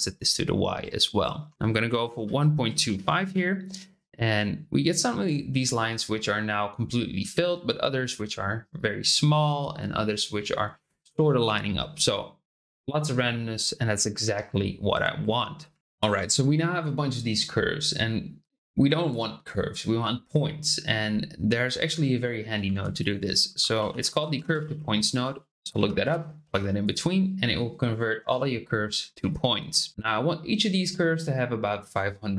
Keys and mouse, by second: 0.2 click, 1.5-3.5 drag, 15.8-22.4 middle drag, 22.6 shift+a, 25.7 Down.